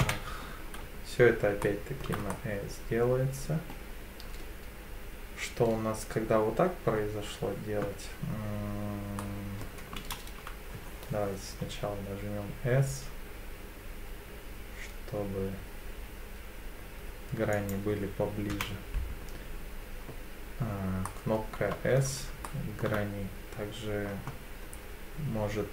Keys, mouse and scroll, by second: 0.0 KP_7, 1.6 shift+middle click, 2.3-3.7 middle drag, 9.2 middle click, 10.0 ctrl+z, 11.4 s, 17.5-18.5 drag, 18.5 KP_7, 21.0 middle click, 22.4 shift+middle click.